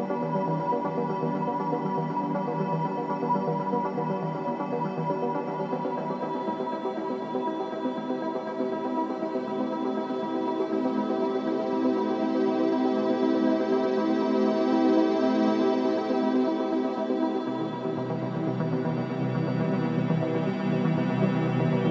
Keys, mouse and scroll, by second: 1.5 e, 6.3 ctrl+z, 7.6 i, 11.6 e, 15.4 ctrl+b, 17.9 ctrl+z, 18.7 ctrl+b, 20.8 click, 21.3-21.9 middle drag.